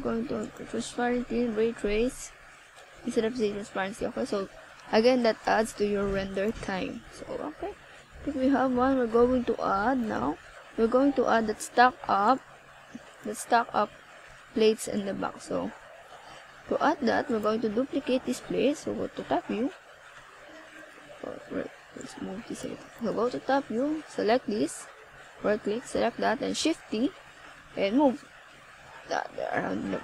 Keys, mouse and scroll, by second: 0.3 right click, 1.4 click, 5.0 right click, 7.4 KP_7, 9.8 shift+d, 11.4 click, 12.0 r, 14.4 click, 15.5 g, 16.7 click, 17.8 click, 21.4 r, 22.1 click, 22.7 ctrl+s, 27.7 KP_1, 29.8 ctrl+s.